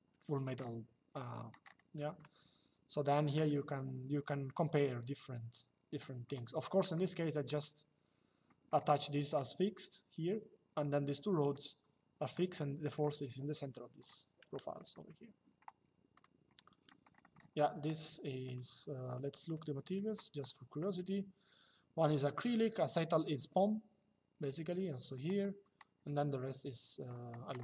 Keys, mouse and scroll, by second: 1.8 shift+middle click, 5.7 middle click, 6.6 shift+middle click, 8.2 middle click, 11.2 shift+middle click, 14.2 shift+middle click, 14.6 middle click, 15.9 click, 16.6 shift+middle click, 16.9 middle click, 18.2 click.